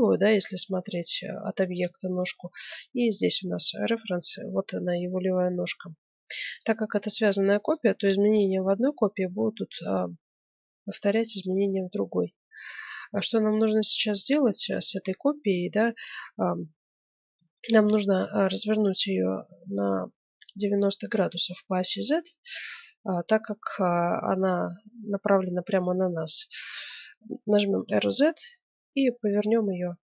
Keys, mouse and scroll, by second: 2.0 middle click, 2.7-4.4 middle drag, 5.6-7.4 drag, 7.5-9.1 middle drag, 9.1-13.8 middle drag, 14.0 middle click, 15.0-19.2 middle drag, 20.3-22.9 middle drag, 27.7 r.